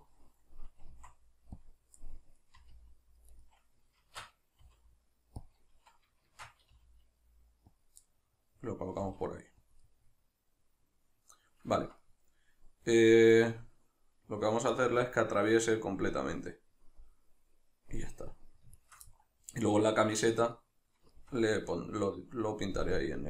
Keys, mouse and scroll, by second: 0.9 s, 1.7 click, 2.1-3.5 middle drag, 2.6 r, 3.5 right click, 4.1 shift+Tab, 4.7 r, 5.5 click, 6.3 shift+Tab, 7.8 click, 8.1-9.8 middle drag, 9.0 g, 9.8 click, 9.8-11.8 middle drag, 18.8 shift+right click, 19.1 middle click.